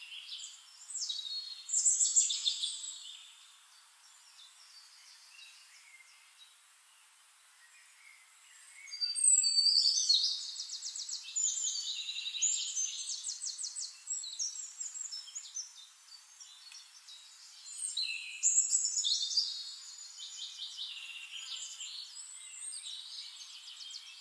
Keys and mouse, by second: 2.3-4.6 drag, 4.8 click, 6.6-11.1 drag, 9.7-11.1 middle drag, 9.7-12.3 right drag, 11.2 shift+click, 11.2-12.3 shift+middle drag, 13.6 click, 16.9 click, 18.7 click, 21.0 click, 21.9 ctrl+z, 22.6 ctrl+z, 23.1 click.